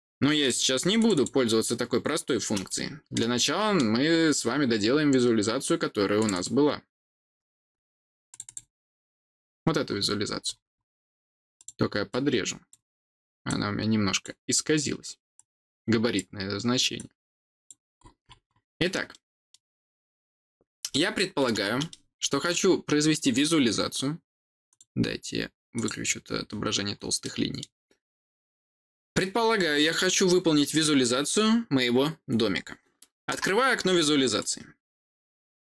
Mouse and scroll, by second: 0.3 click, 0.9 click, 1.1 click, 2.6-3.7 middle drag, 4.4 scroll down 2, 6.1 click, 6.2 click, 8.2 click, 8.4 click, 9.2-10.7 scroll down 2, 11.5 click, 12.0 click, 13.4 click, 15.3 click, 16.9 click, 17.9-18.5 scroll down 3, 19.0 middle click, 20.8 middle click, 21.8 middle click, 24.6 click, 25.7 click, 27.1-34.3 middle drag, 34.3 click.